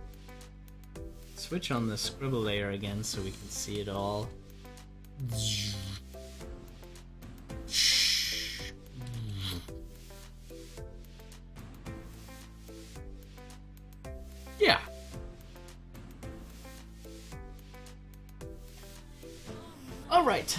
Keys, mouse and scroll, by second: 1.6 click, 2.8 scroll down 1, 3.3 KP_Add, 3.4 Right, 5.0 KP_Add, 5.1 Right, 5.6 Right, 6.3 scroll down 1, 7.1 Right, 8.8 Right, 10.1 scroll up 1, 11.0 Right, 11.9 KP_Add, 11.9 Right, 12.9 KP_Add, 13.0 Right, 15.6 scroll up 1, 17.7 click, 19.6 scroll up 1, 20.0-20.5 middle drag.